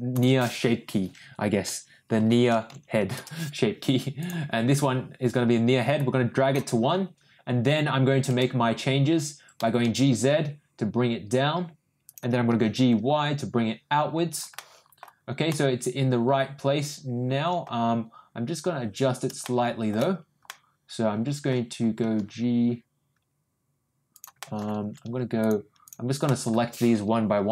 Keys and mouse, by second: 4.1 click, 5.9 click, 8.2 Tab, 9.6 g, 12.5 g, 14.5 middle click, 15.5 middle click, 16.5 middle click, 17.1 middle click, 19.4 shift+middle click, 20.4 middle click, 21.3 middle click, 22.0 g, 24.3 middle click, 25.4 click, 25.8 click, 26.2 ctrl+middle click.